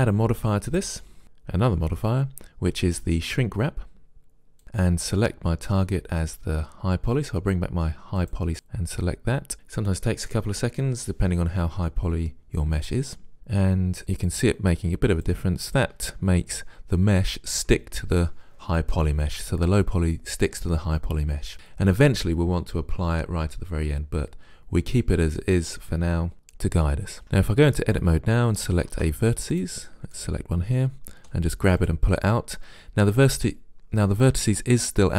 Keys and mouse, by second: 0.7-2.6 drag, 8.2-9.5 drag, 13.3 middle click, 14.0-17.5 drag, 27.2 Tab, 28.0 click, 28.9 ctrl+Tab, 30.2-31.2 drag, 31.2 g.